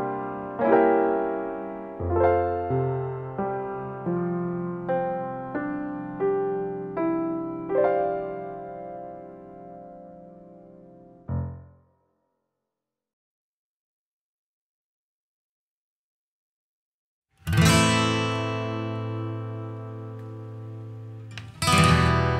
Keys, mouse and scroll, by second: 0.4 click, 4.2-5.2 scroll down 6, 5.2 middle click, 5.8-6.2 scroll up 3, 6.6 space, 7.2 click, 7.2-8.3 scroll up 8, 8.3 scroll up 1, 8.8-9.2 scroll down 1, 9.3 middle click, 11.3 scroll up 1, 13.6 click, 14.3 middle click, 14.6 scroll up 5, 14.9 middle click, 15.5 click, 16.0 click, 16.4-17.0 click, 16.8 click, 17.1-17.8 click, 17.6 click, 18.3 click, 18.8 middle click, 19.7 click, 20.1 click, 21.1 click, 21.1 scroll down 2, 21.2 middle click.